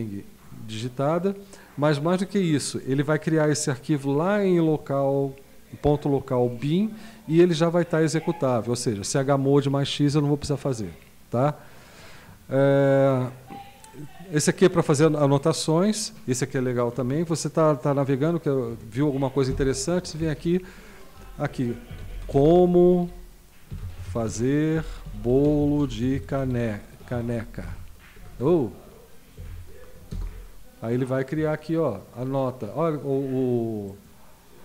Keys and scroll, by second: 19.5 super+F6, 21.6-30.0 typing, 30.1 Return.